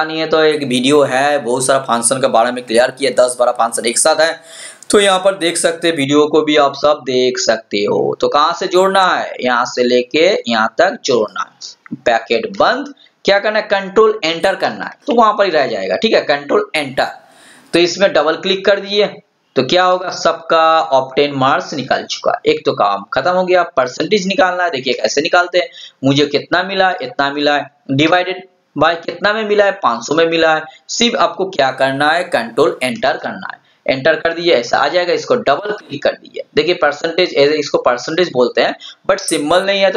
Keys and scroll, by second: 14.7 ctrl+Return, 33.2 ctrl+Return.